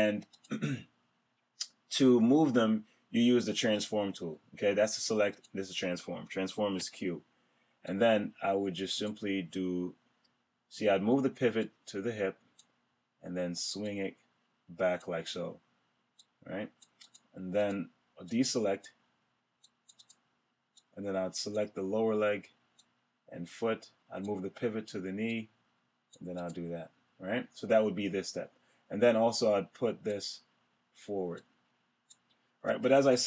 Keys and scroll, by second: 6.7 q.